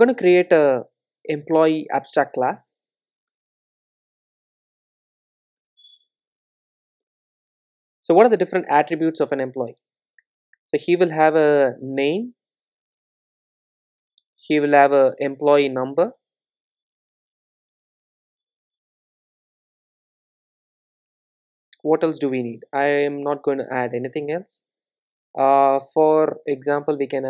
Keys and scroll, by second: 5.7 Return, 7.3 super+z, 9.6 super+z, 9.8 Return, 14.2 Return, 22.5 super+n.